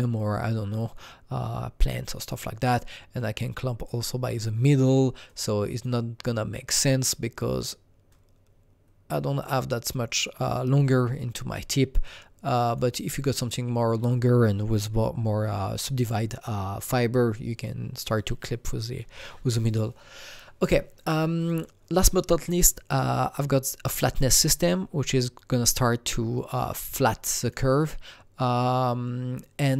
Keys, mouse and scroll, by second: 3.1-11.6 drag, 12.6 click, 13.2-18.6 drag, 20.4 scroll down 2, 20.5 click, 21.4 click, 22.9 click, 23.9-29.7 drag.